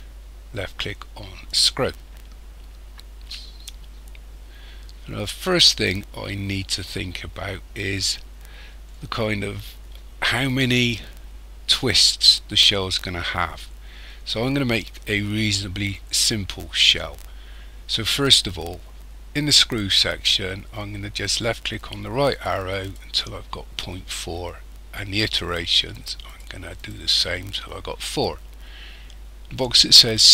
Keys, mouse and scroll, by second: 21.2 click, 21.8 click, 22.3 click, 22.8 click, 25.9 click, 26.2 click, 26.8 click.